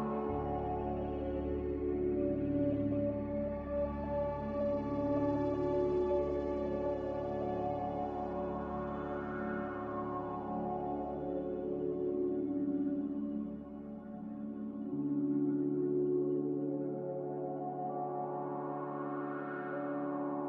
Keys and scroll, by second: 15.6 n.